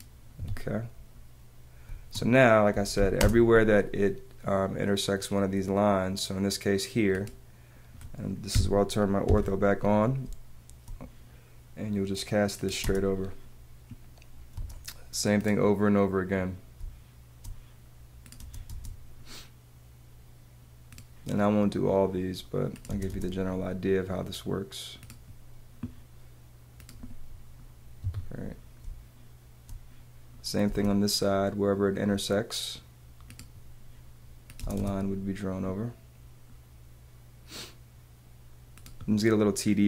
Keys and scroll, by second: 0.3 Escape, 1.8 space, 2.9 l, 3.2 space, 4.0 space, 9.2 F8, 10.2 space, 12.8 space, 14.5 space, 16.7 space, 18.4 space, 19.5 space, 22.9 space, 24.0 space, 28.0 super+z, 29.0 space, 30.6 space, 34.6 space.